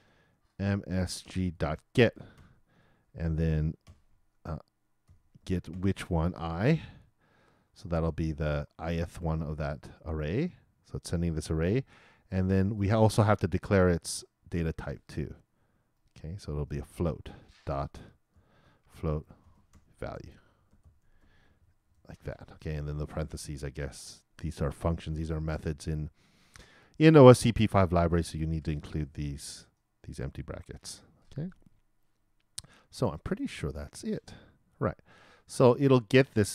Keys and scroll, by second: 3.2 shift+t, 3.8 shift+9, 5.4 shift+\, 5.7 shift+0, 19.8-22.4 typing.